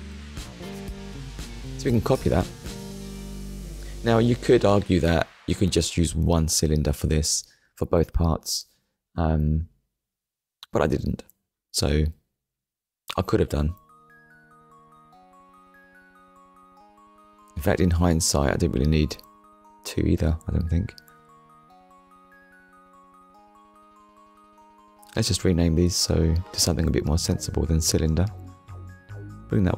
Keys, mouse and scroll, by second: 0.1 shift+middle click, 1.7 click, 4.5 click, 5.9-7.4 typing, 8.7 d, 11.2-13.5 typing, 14.3 Return, 16.3 ctrl+s, 20.5 shift+d, 21.1 right click, 22.6 click, 23.5 click, 25.0 r, 25.5 shift+b, 25.9 o, 26.6 m, 27.5 Return, 29.2 click.